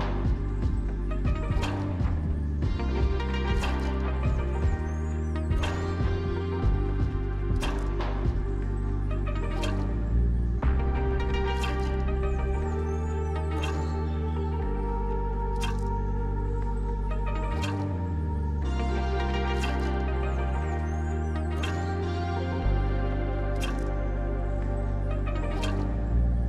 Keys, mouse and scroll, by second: 1.7 right click, 6.3 double click, 13.4 double click, 14.0 3, 14.2 Return, 19.9-20.6 scroll up 1, 20.6-21.3 scroll down 1, 22.7-24.9 scroll down 3.